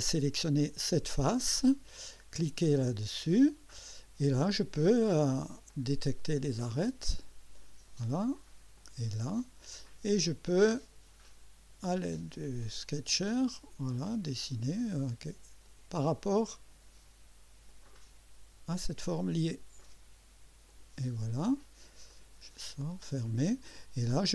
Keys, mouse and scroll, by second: 0.6 click, 2.8 click, 3.8 scroll up 1, 4.2 right click, 5.7 click, 7.2 click, 8.8 click, 11.9 click, 13.9 click, 15.6 click, 17.7 click, 20.7 click, 22.1 right click, 22.9 click.